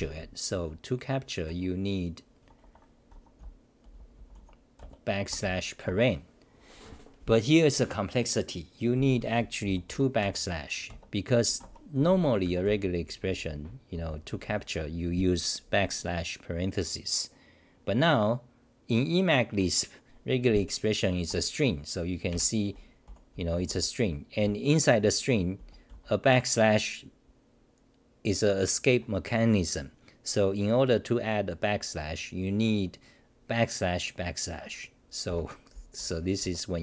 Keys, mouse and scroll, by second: 22.3 h.